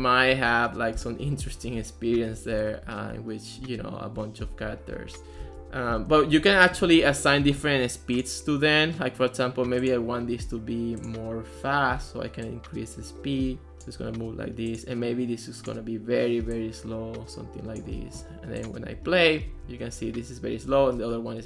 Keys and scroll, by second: 0.0-3.4 typing, 5.0-7.4 typing, 19.0-21.4 typing.